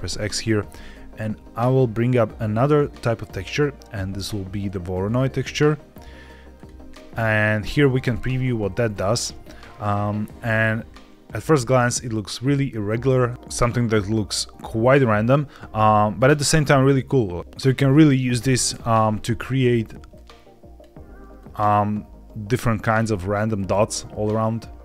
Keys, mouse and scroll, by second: 0.1-0.5 scroll up 2, 0.7 shift+a, 7.1-7.4 scroll down 2, 8.0 ctrl+shift+click, 9.1 middle click, 9.5-11.0 scroll down 2, 13.3-15.2 drag, 16.1 click, 18.3 ctrl+shift+click, 20.0 click, 21.3-22.8 drag, 23.4-24.8 drag.